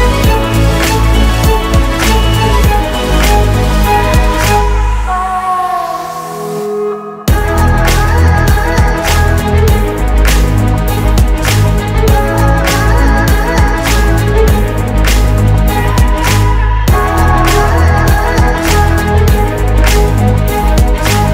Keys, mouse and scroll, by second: 5.8 typing, 7.5 typing, 7.9 ctrl+alt+Home, 10.5 Return, 11.0-13.8 typing, 14.4 Return, 16.8 ctrl+a, 17.7 double click, 18.9 shift+click.